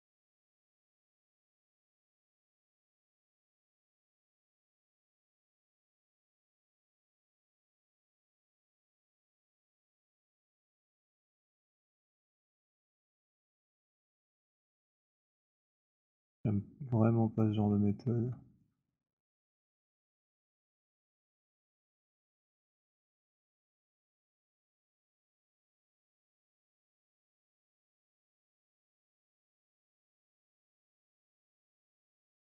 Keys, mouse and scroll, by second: 0.4 click, 2.6 click, 5.1 click, 6.1 alt+click, 7.3 click, 11.4 click, 13.0 alt+click, 14.6 click, 17.3 click, 18.7 alt+click, 19.2 alt+middle click, 20.9 alt+middle click, 21.4 alt+click, 22.5 click, 24.6 click, 26.2 click, 27.7 alt+click, 28.6 click, 31.1 click.